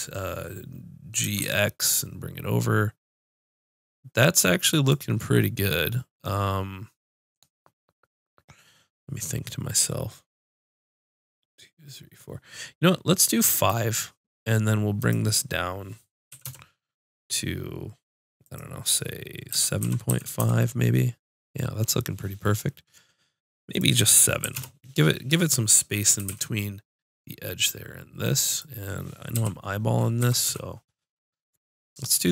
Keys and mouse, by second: 1.2 g, 4.8-6.6 drag, 6.6-10.6 middle drag, 13.5 click, 15.7-16.8 middle drag, 18.4-20.3 drag, 23.7-25.6 drag, 26.1 g, 29.3 KP_3, 29.6 click, 30.1 KP_1, 30.4 KP_5.